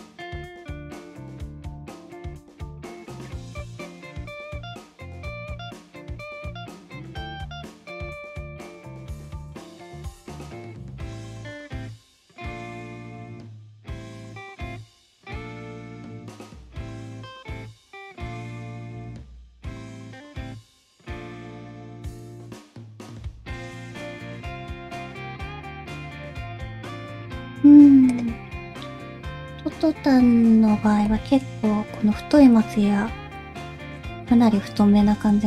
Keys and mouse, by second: 0.0 click, 0.1 middle click, 0.7 click, 0.9 middle click, 1.2 g, 1.7 middle click, 2.5 click, 2.8 g, 3.5 click, 3.7 middle click, 4.1 shift+middle click, 4.7 alt+z, 5.0 click, 5.2 alt+z, 5.5 g, 6.9 alt+z, 7.2 middle click, 7.6 ctrl+z, 8.1 alt+a, 8.2 c, 8.7 alt+z, 8.8 g, 10.2 middle click, 10.4 shift+middle click, 10.6 middle click, 10.9 shift+middle click, 11.1 middle click, 11.6 click, 11.8 g, 12.6 click, 12.7 g, 13.2 click, 13.7 click, 14.0 g, 14.7 click, 14.8 g, 16.0-17.1 middle drag, 19.1 click, 20.1 g, 27.0 alt+a, 28.1 click, 31.0 ctrl+l, 33.0 alt+o, 33.7 middle click, 34.9 g.